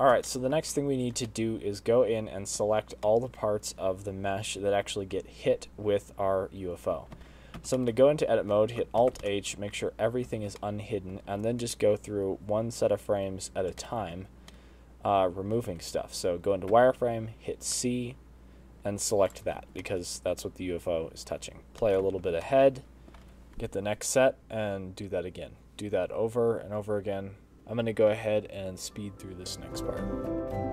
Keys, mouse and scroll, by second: 0.6 shift+right click, 1.3 shift+middle click, 1.7 middle click, 2.7 middle click, 4.4 middle click, 6.2 space, 7.5 space, 8.3 space, 8.6 space, 9.2 Tab, 10.2 middle click, 10.4 alt+h, 10.6 middle click, 11.7 z, 12.0 middle click, 12.7 z, 13.0 middle click, 15.2 shift+middle click, 15.7 scroll up 1, 15.9 middle click, 17.1 z, 18.1 c, 21.0 z, 21.2 middle click, 21.6 space, 21.7 space, 22.0 middle click, 22.8 Left, 23.0 Left, 23.2 middle click, 23.7 z, 23.9 middle click, 24.7 c, 26.9-30.7 typing, 27.6 shift+middle click, 29.1 middle click, 29.2 middle click, 29.5 middle click, 30.2 middle click.